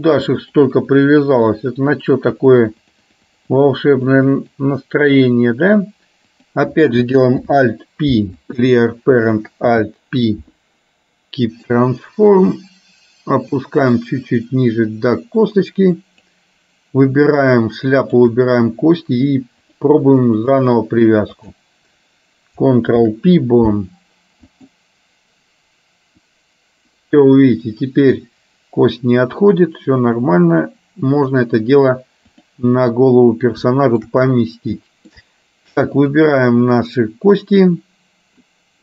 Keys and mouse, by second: 0.6 click, 0.9 click, 1.3 click, 1.9 click, 2.9 click, 3.7-4.7 drag, 6.3 click, 7.4 alt+p, 9.8 alt+p, 13.7-16.4 drag, 18.2 shift+click, 19.7-20.8 drag, 21.6 click, 23.1 ctrl+p, 26.3-31.4 drag, 32.4 click, 33.8 shift+middle click, 34.9 shift+middle click, 36.8-38.4 middle drag.